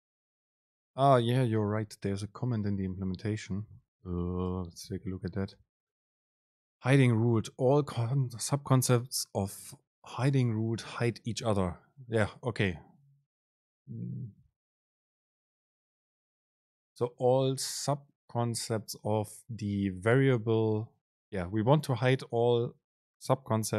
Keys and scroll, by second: 5.1 super+b.